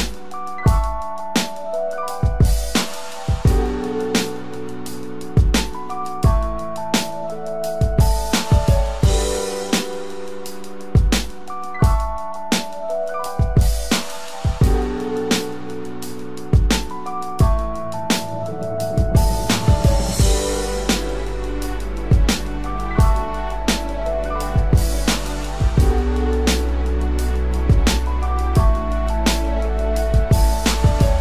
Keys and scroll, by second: 2.0 ctrl+=, 14.8 ctrl+-, 30.2 ctrl+=.